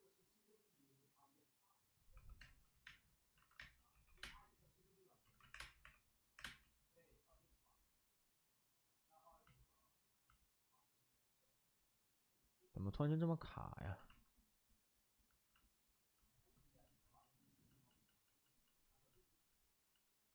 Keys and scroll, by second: 2.1-4.1 typing, 3.3 alt+s, 5.2 ctrl+z, 5.5 3, 5.5 space, 6.3 3, 6.3 space, 13.8 alt+s, 16.7 ctrl+z, 16.9 ctrl+z, 17.1 ctrl+z, 17.3 ctrl+z, 17.6 ctrl+z.